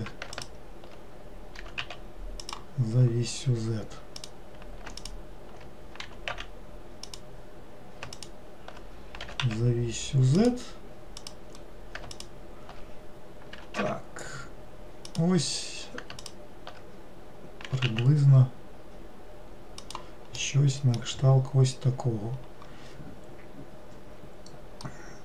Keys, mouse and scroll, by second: 0.4 alt+click, 1.7 g, 4.3 click, 5.1 alt+click, 6.1 g, 8.2 alt+click, 9.3 g, 11.3 click, 12.2 alt+click, 13.6 g, 16.3 alt+click, 17.7 g, 20.5-21.5 middle drag, 21.5-24.8 scroll down 2, 24.9-25.2 middle drag.